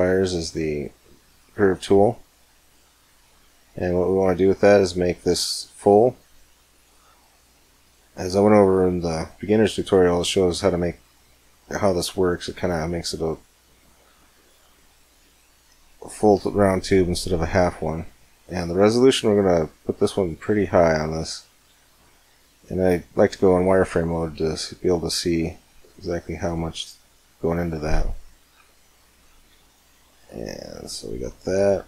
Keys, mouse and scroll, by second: 0.0-1.8 drag, 1.7-3.7 middle drag, 4.6-6.5 drag, 9.2-12.6 middle drag, 13.2-15.2 drag, 14.6-16.4 middle drag, 17.5 middle click, 18.4-20.1 drag, 20.4-24.1 middle drag, 21.6 z, 24.2-26.1 drag, 26.3-28.0 drag, 28.3 Tab, 28.7 middle click, 30.2 right click.